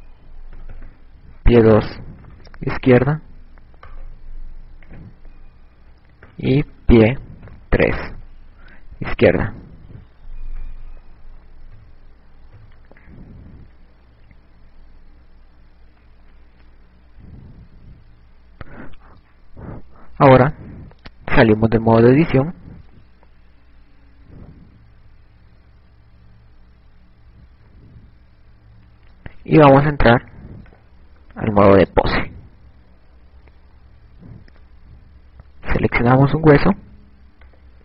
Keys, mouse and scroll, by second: 0.3 click, 0.8 click, 4.6 right click, 5.8 click, 9.4 n, 11.5 KP_1, 13.3 KP_3, 14.9-17.2 scroll down 12, 16.0-17.2 scroll up 1, 21.6 Tab, 23.5 shift+scroll up 2, 25.1 shift+scroll up 1, 25.7 KP_Add, 25.9 KP_Add, 26.5 KP_Add, 26.8 KP_Add, 27.7-28.2 shift+scroll down 3, 28.2-28.6 shift+scroll up 4, 28.7-30.0 ctrl+scroll down 1, 31.6 click, 36.4 right click.